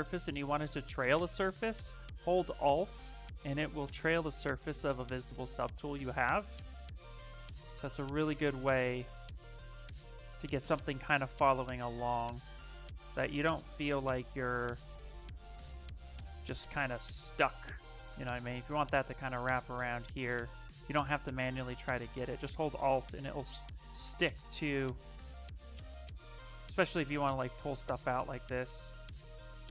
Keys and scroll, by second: 24.6 s, 26.1 ctrl+z, 26.4 s.